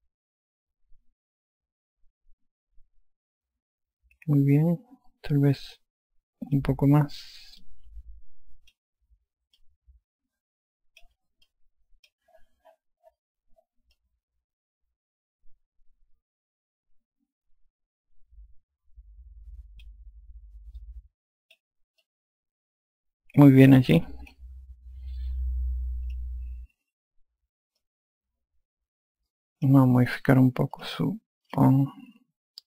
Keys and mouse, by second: 0.7 alt+click, 8.7 click, 10.6 click, 12.5 alt+click, 15.0 alt+click, 21.8 click, 23.1 click, 27.1 click, 28.8 alt+click, 31.8 click.